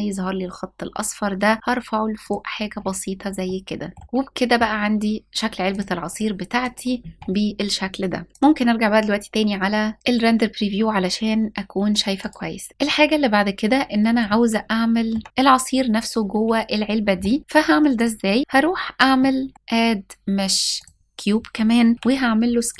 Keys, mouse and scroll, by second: 1.8 click, 2.3-3.1 scroll down 1, 3.1 middle click, 3.1 scroll down 1, 5.3-6.4 drag, 8.1 ctrl+s, 8.3 click, 11.8 click, 12.6 shift+middle click, 12.7 ctrl+s, 13.4-13.9 scroll up 2, 13.9-14.8 shift+middle drag, 17.6 click, 18.8 middle click, 19.5 click, 21.7 s, 22.3 click.